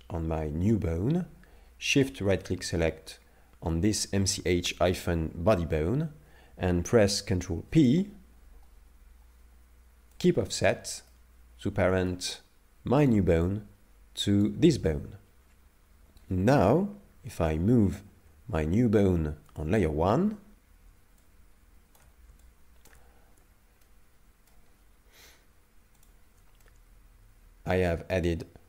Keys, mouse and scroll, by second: 2.0 shift+right click, 7.5 ctrl+p, 11.1 middle click, 13.0 right click, 14.4 right click, 16.2 right click, 17.2 m, 21.2 shift+click, 22.4 shift+click, 23.3 Tab, 23.8 middle click, 26.0 shift+click, 26.6 middle click.